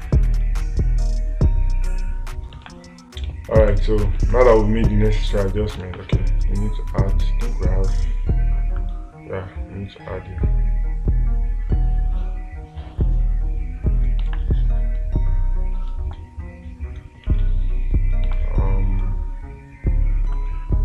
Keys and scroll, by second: 3.1 space, 4.6 space, 6.3 space, 14.7 space, 16.4 space, 18.8 space.